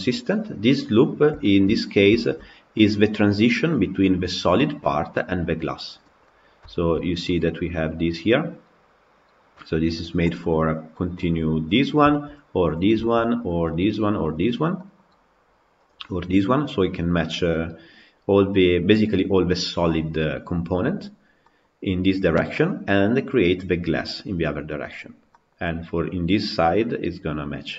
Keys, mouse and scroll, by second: 0.1-0.5 scroll down 2, 0.5-1.0 scroll up 1, 1.0 scroll down 4, 1.3-2.4 shift+middle drag, 2.4-3.4 scroll up 4, 3.4 click, 6.1-6.8 middle drag, 6.8 scroll up 2, 7.1-11.2 middle drag, 11.2 click, 11.7 scroll down 3, 11.9-12.5 shift+middle drag, 12.5 click, 12.8-13.6 shift+middle drag, 13.6 click, 14.2 click, 14.4 scroll down 2, 14.6-15.7 middle drag, 15.7 click, 20.7-21.3 scroll up 5, 21.3 middle click, 21.6 scroll down 2, 22.4-24.9 middle drag, 24.9 scroll down 2, 25.2-27.7 middle drag.